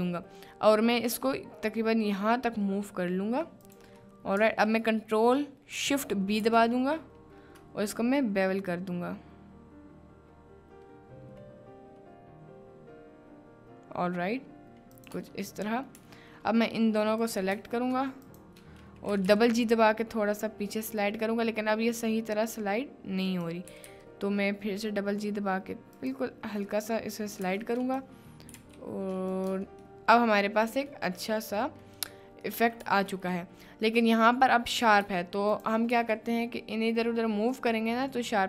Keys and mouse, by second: 3.6 right click, 4.1 click, 15.2 Tab, 15.9 middle click, 16.0 Tab, 17.2 click, 18.3 shift+click, 19.1 g, 19.3 g, 23.7 g, 23.9 g, 25.9 click, 26.6 middle click, 27.4 s, 27.5 x, 27.8 click, 28.5 s, 28.6 y, 29.3 click, 29.5 Tab, 29.9-30.6 drag, 30.6 middle click, 31.1 middle click, 31.7 middle click, 32.5 middle click, 32.9 Tab, 33.5 middle click, 34.7 click, 35.5 shift+click, 36.0 g, 38.0 middle click.